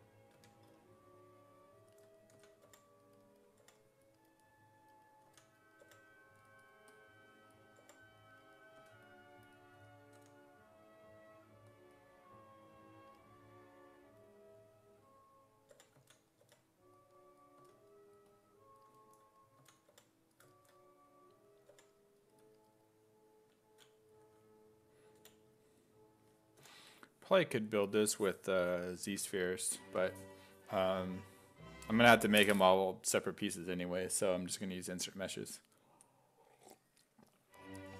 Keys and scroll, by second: 0.4 1, 2.4 s, 2.7 5, 3.6 5, 5.3 s, 5.8 5, 7.8 5, 8.8 s, 9.8 s, 10.2 w, 15.5-17.6 typing, 19.6 s, 19.9 5, 21.7 5, 25.2 b, 26.6 i.